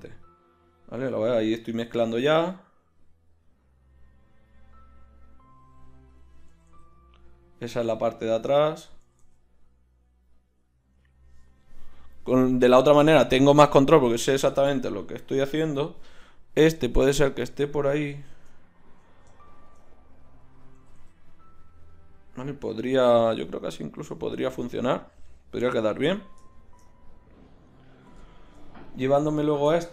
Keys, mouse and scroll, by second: 0.1-5.1 middle drag, 1.9 r, 6.2-7.9 drag, 6.5 r, 9.1 r, 14.8 r, 20.7 r.